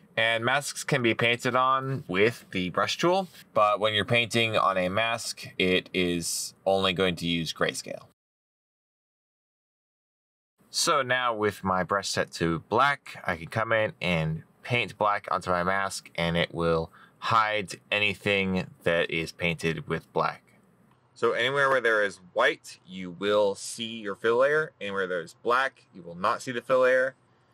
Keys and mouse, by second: 12.4 middle click.